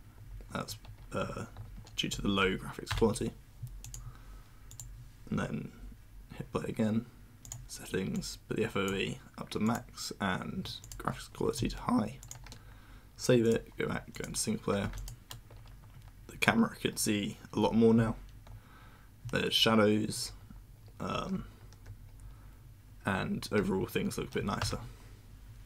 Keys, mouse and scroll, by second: 1.2 w, 3.8 click, 4.7 click, 7.4 click, 8.1-8.8 drag, 9.6 click, 10.8 click, 12.2 click, 13.4 click, 14.1 click, 14.9 click, 20.8-21.8 typing, 23.6 w.